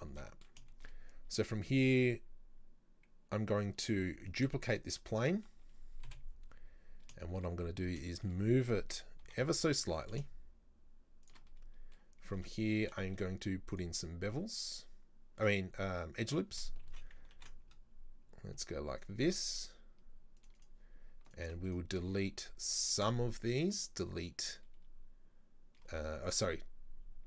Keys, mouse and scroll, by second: 0.2 Tab, 0.3 middle click, 1.1-3.4 scroll up 2, 4.3 shift+d, 5.1 middle click, 6.1 KP_7, 6.6-7.0 scroll up 1, 7.0-7.6 scroll down 3, 7.3 shift+middle click, 7.6-8.1 scroll up 4, 8.1-9.3 shift+middle drag, 9.3 g, 11.5-13.1 middle drag, 13.1 ctrl+r, 16.9 ctrl+z, 17.4 ctrl+r, 21.3 alt+right click, 21.7 alt+shift+right click, 22.7 alt+shift+right click, 23.7 Delete.